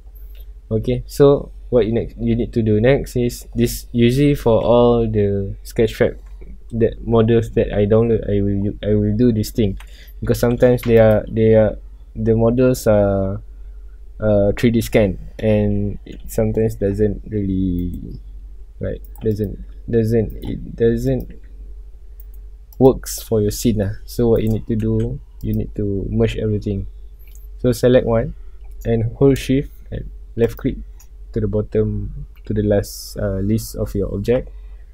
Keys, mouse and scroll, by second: 0.0 scroll up 1, 0.4-2.6 middle drag, 2.6-5.1 scroll down 1, 9.8-10.2 middle drag, 10.2 alt+a, 10.6 scroll up 1, 10.9 click, 11.6-11.9 middle drag, 11.9 scroll up 1, 12.8 scroll down 1, 13.5-16.9 middle drag, 16.9 g, 17.9 right click, 18.6 g, 19.1 right click, 19.3 click, 19.6 g, 20.5 right click, 21.0 click, 21.4 g, 22.4 right click, 22.7 click, 23.8 g, 24.5 right click, 24.8 alt+a, 25.3 a, 25.4 click, 25.8 scroll down 1, 27.2-28.2 scroll up 1, 28.2 scroll down 1, 30.4 shift+click, 31.7 scroll up 1, 32.7-34.4 scroll down 1, 34.4 scroll up 1.